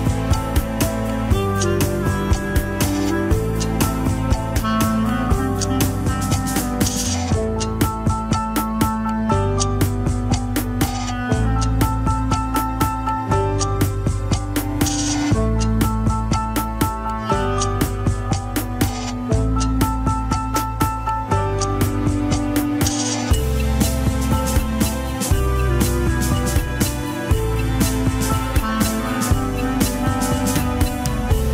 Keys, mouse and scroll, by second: 0.9 scroll down 2, 1.2 shift+middle click, 1.8-2.2 scroll up 1, 2.2 shift+middle click, 2.6-3.0 scroll up 2, 3.0 f, 5.0-9.1 drag, 9.1 middle click, 9.8-10.9 drag, 10.9 middle click, 11.5 click, 12.5 middle click, 13.0-14.7 drag, 14.7-17.1 middle drag, 17.1 click, 17.8 middle click, 18.5 click, 19.2 middle click, 19.8-22.1 drag, 22.1 middle click, 22.5 scroll down 1, 22.7 shift+middle click, 23.7-25.1 drag, 25.1 scroll down 2, 25.4-26.9 middle drag, 26.9 KP_1, 27.2 scroll up 1, 27.4 shift+middle click, 27.8 scroll up 1, 29.2 ctrl+click, 30.1 ctrl+click, 30.8 ctrl+click, 31.3 scroll up 2.